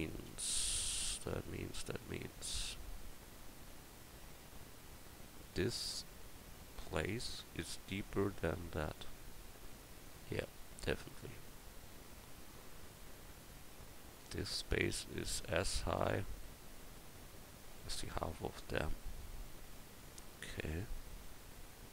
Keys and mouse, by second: 0.8 KP_1, 20.6-21.6 middle drag.